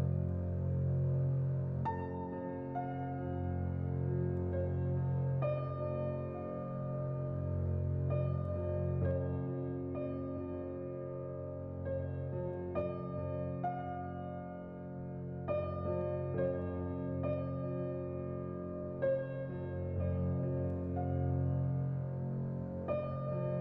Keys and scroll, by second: 6.7 z, 8.8 x, 9.9-10.8 typing, 15.4-16.1 typing, 22.9 z.